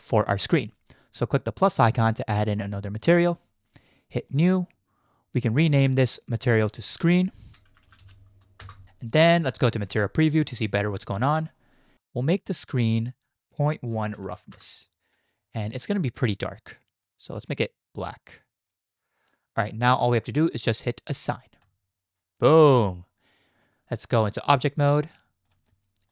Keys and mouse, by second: 3.1-4.6 drag, 6.6 click, 6.8-8.6 drag, 7.8 e, 8.9 shift+middle click, 9.9 z, 13.3-14.5 drag, 16.3 drag, 21.7 click, 24.9-25.5 drag.